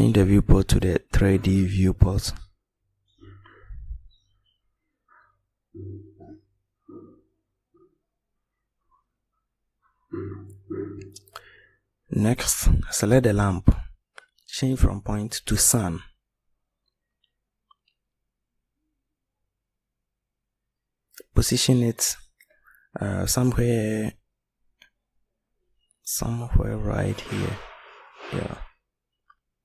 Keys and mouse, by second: 24.7 middle click, 26.2 middle click, 29.2 click.